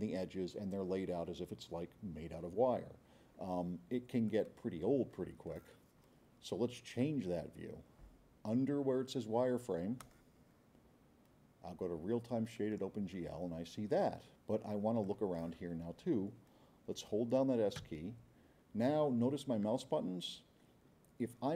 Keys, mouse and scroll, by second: 4.3-5.6 drag, 10.0 click, 12.6 click, 15.0-15.5 drag, 17.8 s.